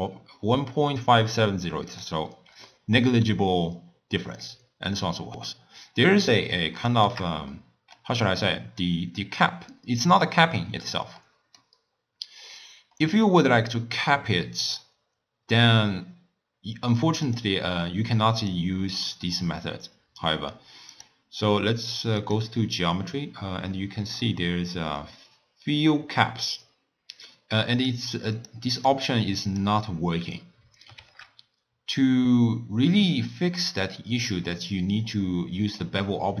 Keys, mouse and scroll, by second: 2.7-5.8 middle drag, 5.8 scroll up 1, 6.7-10.5 shift+middle drag, 11.2-16.0 middle drag, 17.2 click, 18.4 click, 19.0-20.9 scroll down 5, 20.9 click, 22.2 click, 22.7-23.1 scroll up 1, 23.1-23.5 scroll down 2, 23.5 scroll up 2, 23.7-27.3 scroll down 5, 27.7 click, 28.4 click, 28.7 click, 29.5 click, 31.0 shift+a.